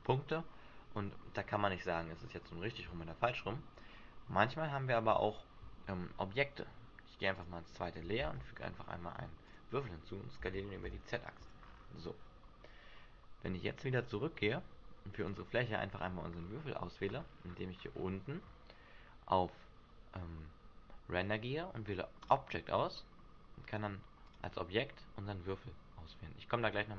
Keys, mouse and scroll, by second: 7.3 click, 8.2 shift+a, 11.4 s, 11.4 click, 11.6 scroll down 1, 12.4 scroll down 6, 13.9 click, 15.2 right click, 16.4 scroll up 4, 17.2-17.7 scroll down 3, 18.1-19.1 scroll down 9, 19.1-20.6 scroll down 2, 22.3 click, 24.2 click.